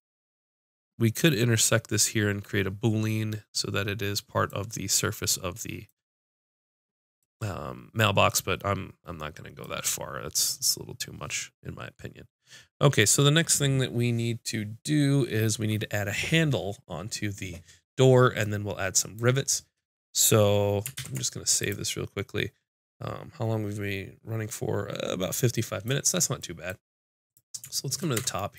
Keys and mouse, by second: 21.0 ctrl+s, 27.0-28.2 drag, 28.2 Tab.